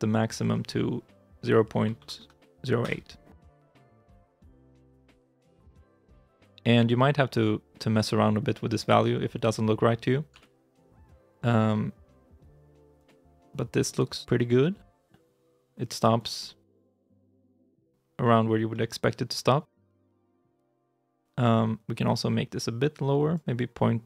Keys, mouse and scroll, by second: 5.4 g, 10.2 g, 14.0 g, 16.3 middle click, 16.6 shift+middle click, 16.9 scroll up 1, 17.0 middle click, 18.6 middle click, 19.4 g.